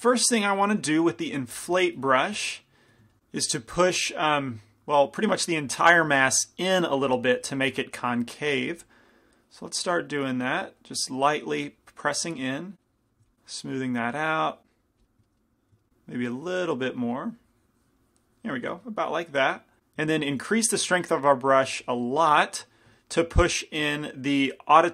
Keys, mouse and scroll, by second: 0.8 i, 1.4 f, 1.9-3.2 middle drag, 3.4-8.9 middle drag, 7.0 f, 8.9-14.9 drag, 15.1-18.2 middle drag, 16.7-19.0 drag, 19.0 middle click, 19.8 shift+f, 20.4 shift+f, 22.3-23.7 middle drag.